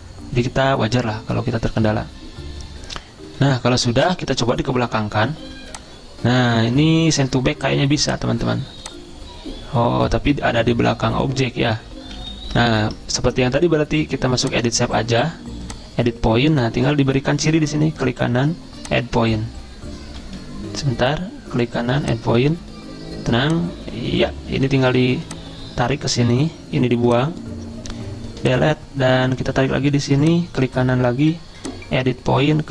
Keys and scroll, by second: 12.1 ctrl+z, 12.5 ctrl+z, 20.6 ctrl+z.